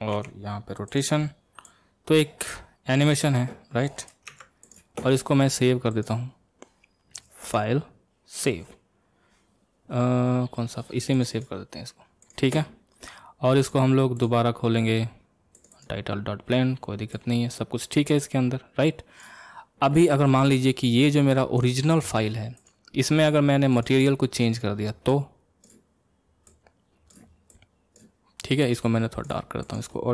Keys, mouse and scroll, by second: 20.6-22.5 middle drag, 22.5 click, 23.7 click, 25.1 click, 29.6 click.